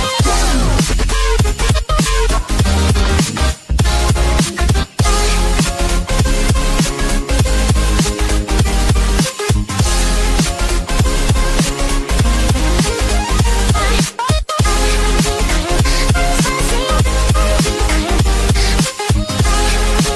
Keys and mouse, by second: 1.2 Return, 3.0 click, 5.6 click, 7.2 click, 8.0 click, 8.6 click, 9.1 click, 13.1 click, 16.5 click, 19.7 click.